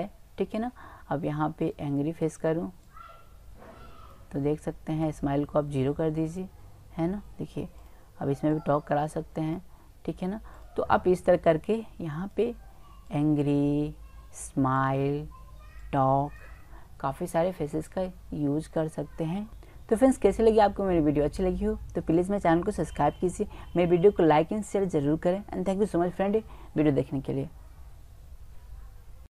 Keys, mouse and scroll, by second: 0.6-1.6 middle drag, 5.0-7.4 drag, 7.8-10.2 drag, 10.5-14.6 drag, 14.8-17.5 drag.